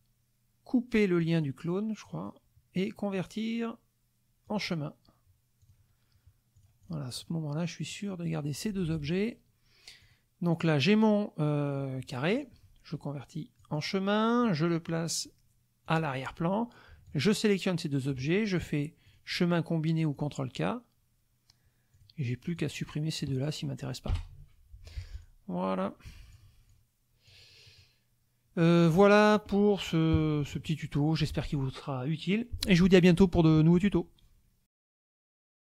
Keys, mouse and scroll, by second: 1.2 click, 2.0 click, 4.5 click, 5.6 click, 6.6 click, 7.1 click, 7.9 click, 8.9 ctrl+z, 9.1 ctrl+click, 10.0 click, 12.3 click, 13.6 click, 14.9 click, 15.8 click, 17.0 shift+click, 19.1 click, 20.1 click, 21.9 click, 22.5 click, 24.1 Delete, 24.8 F1, 25.1 click, 26.1 click, 26.7 click, 27.6 middle click, 28.6 click.